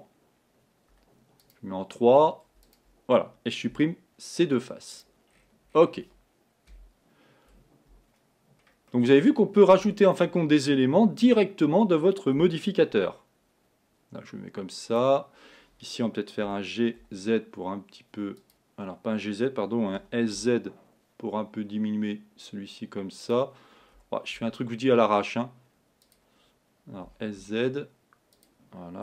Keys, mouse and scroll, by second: 1.4 3, 1.5 click, 2.7 click, 6.8 KP_1, 9.0-11.3 middle drag, 11.3 l, 12.6 g, 16.5 g, 20.0 s, 24.0 g, 27.1 s.